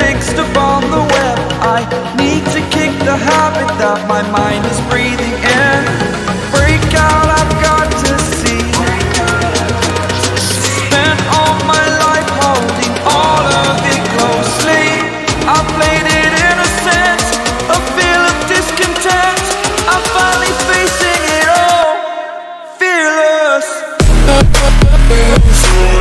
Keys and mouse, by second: 1.1-2.1 drag, 2.3 click, 3.7 ctrl+t, 5.7 click, 7.7 click, 8.3 Return, 8.8 click, 9.3 ctrl+t, 9.6 Right, 14.9 click, 16.0 click, 16.5-20.2 typing, 16.7 click, 22.0 click, 23.4 click, 24.5 click, 25.8 click.